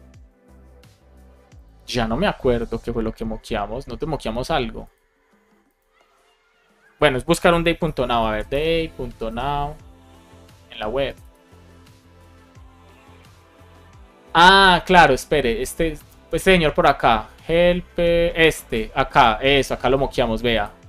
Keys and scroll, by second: 7.7 shift+super+f, 8.2 shift+d.